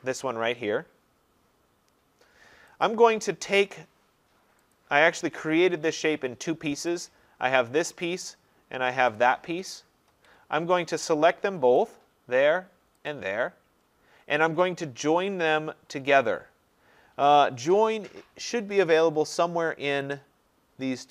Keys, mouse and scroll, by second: 2.9 click, 4.8 click, 5.9 Escape, 7.1 click, 9.2 click, 10.1 Escape, 11.9 click, 13.1 click, 20.1 click.